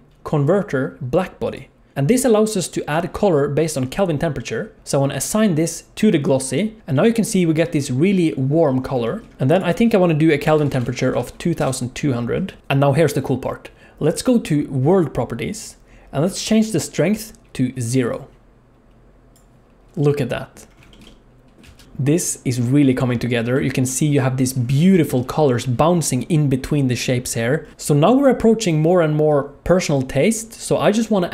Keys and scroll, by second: 10.5 2, 10.8 0, 12.4 alt+a, 12.6 ctrl+s, 21.7 alt+shift+z.